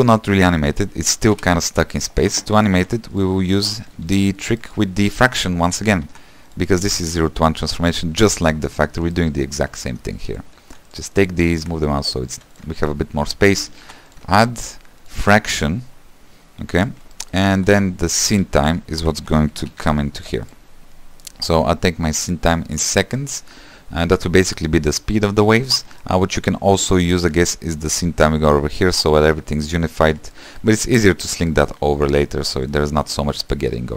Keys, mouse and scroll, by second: 1.2 space, 1.4 shift+Left, 4.2 q, 5.7 g, 13.9 shift+d, 17.0-20.3 drag, 20.3 s, 22.9-33.9 drag.